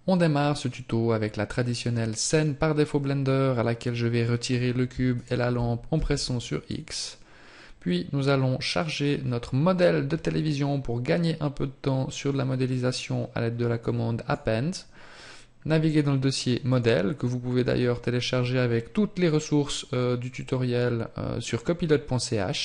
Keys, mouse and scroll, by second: 5.2 shift+right click, 6.0 x, 8.8 click.